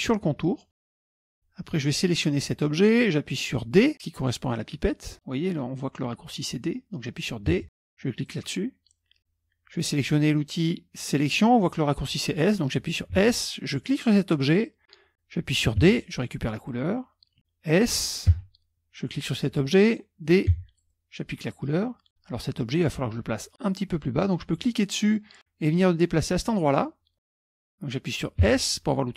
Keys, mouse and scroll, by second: 1.3 click, 2.3 click, 7.7 d, 8.3 click, 13.3 s, 13.9 click, 15.9 d, 16.7 click, 18.4 s, 19.5 click, 20.6 d, 20.9 click, 22.1 F1, 24.7-26.9 drag, 28.6 s.